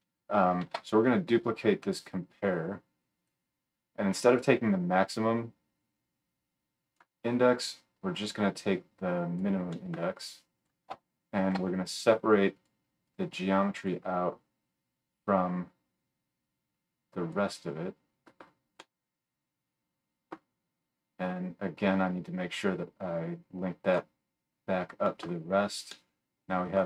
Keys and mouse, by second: 0.6 shift+d, 5.7-10.6 middle drag, 10.6-13.0 shift+drag, 11.4 shift+d, 18.8-20.2 middle drag, 23.2-26.8 middle drag.